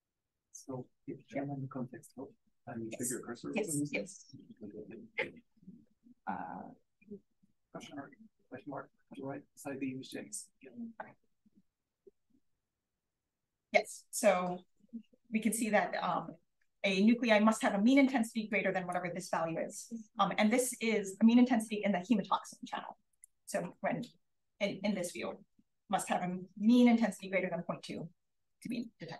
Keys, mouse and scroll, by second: 0.2 click, 10.0 click, 18.4 click, 23.0 click, 28.6 click.